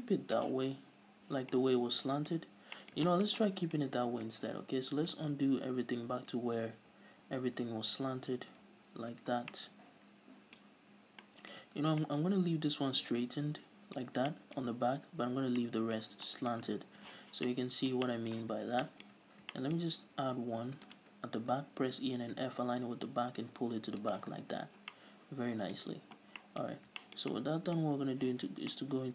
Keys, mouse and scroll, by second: 2.5 scroll up 2, 9.2 ctrl+z, 9.4 scroll down 2, 10.7-11.3 scroll up 2, 11.8 ctrl+shift+z, 16.8 a, 17.1 z, 19.2 scroll up 1, 20.7 ctrl+r, 24.2 shift+click, 24.4 middle click, 24.4 scroll down 2, 24.6 z, 25.0-26.8 middle drag, 26.8 scroll up 2, 26.9-29.1 shift+middle drag, 27.9-28.3 scroll up 2, 28.3 z.